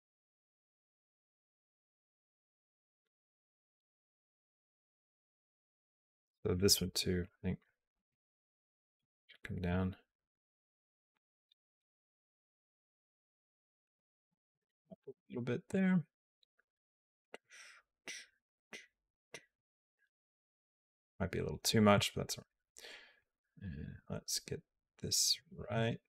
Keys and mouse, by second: 7.1 click, 7.5 click, 7.8 g, 9.5-11.8 drag, 12.8 click, 14.2 g, 16.4-21.5 drag, 23.0-25.2 drag, 25.5 a.